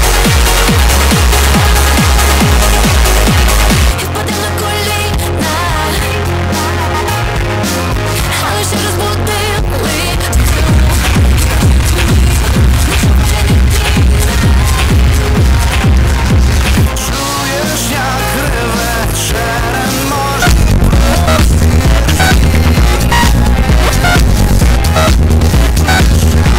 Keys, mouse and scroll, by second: 3.9 Page_Down, 16.6 Page_Down.